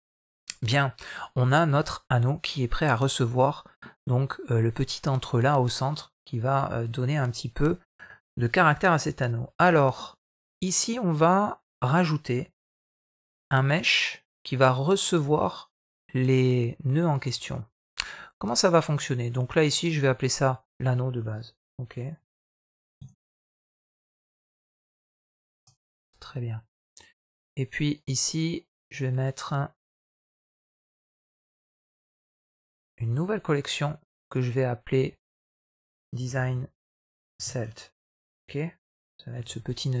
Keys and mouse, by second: 5.6 middle click, 9.6 middle click, 10.3 middle click, 17.1 middle click, 19.7-25.5 drag, 22.1 n, 27.2 click, 27.9 right click, 33.6-40.0 drag.